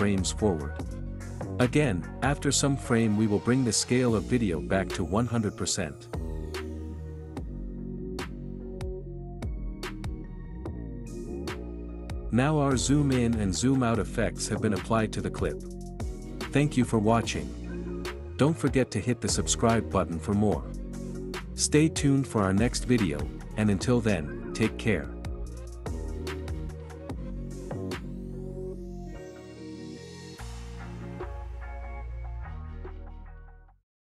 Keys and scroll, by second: 0.0 ctrl+v, 1.2 space, 3.2 space, 11.4 space, 20.1 space.